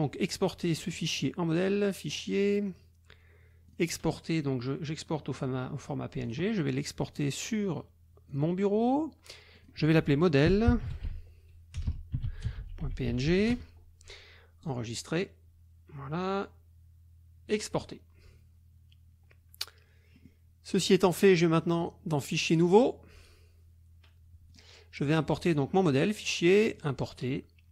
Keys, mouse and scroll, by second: 0.2 middle click, 1.8 click, 3.7 click, 6.3 click, 8.3 click, 9.6 click, 10.2-13.8 typing, 14.6 click, 17.5 click, 20.2 click, 21.8 click, 22.5 click, 24.4 click, 25.5 click, 26.8 click.